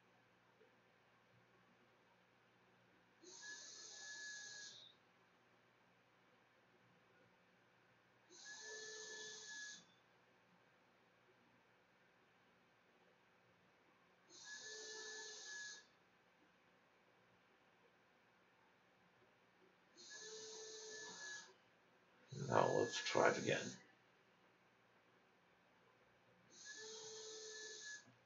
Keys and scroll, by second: 10.2 Home, 10.5 Delete, 11.1-12.0 typing, 14.0-14.5 typing, 14.4 Return, 14.9 Delete, 15.4 Delete, 15.8-17.1 typing, 18.3 ctrl+s, 19.1 a.